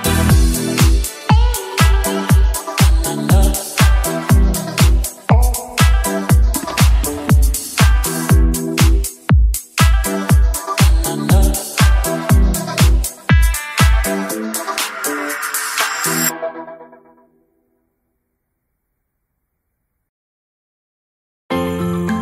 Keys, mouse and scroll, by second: 1.1 click, 1.8 g, 2.0 y, 5.2 click, 5.7 KP_7, 7.4 g, 7.7 x, 8.9 click, 9.3 r, 9.8 z, 10.4 click, 11.5 g, 11.7 y, 12.2 click, 12.8 shift+d, 13.0 x, 15.0 click, 15.7 KP_1, 16.6 s, 17.4 click, 18.0 g, 18.3 z, 22.0 click.